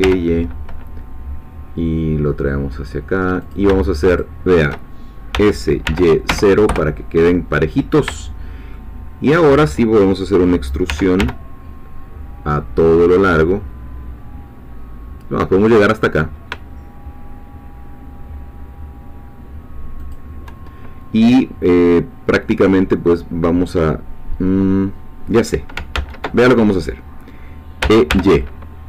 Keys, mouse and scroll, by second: 0.0 y, 3.4 shift+click, 4.2 shift+click, 5.3 s, 5.8 y, 6.3 0, 6.7 Return, 8.7 shift+middle click, 10.9 e, 11.2 y, 20.0 shift+click, 26.0 ctrl+z, 27.8 e, 28.1 y.